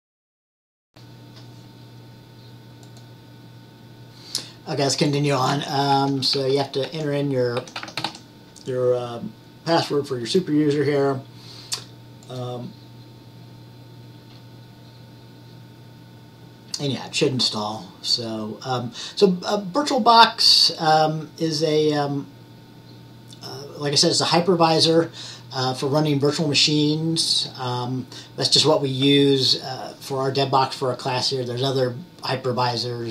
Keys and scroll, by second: 5.8-8.7 typing.